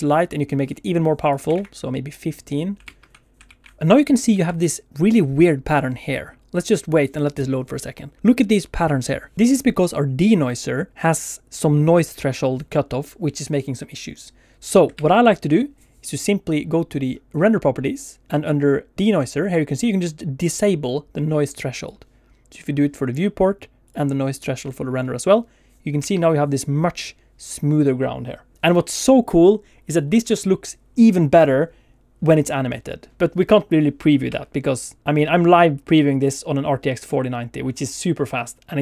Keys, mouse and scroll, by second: 0.4 middle click, 1.2 click, 14.9 ctrl+space, 17.9 click, 18.2-20.1 scroll down 2, 21.7 click, 23.8 click, 35.0 ctrl+space, 35.2 click.